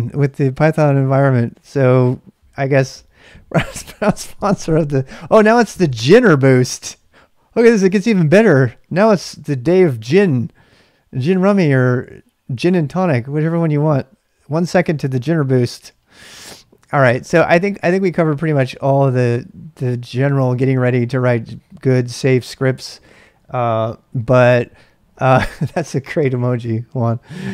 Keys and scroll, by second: 17.0-18.9 typing.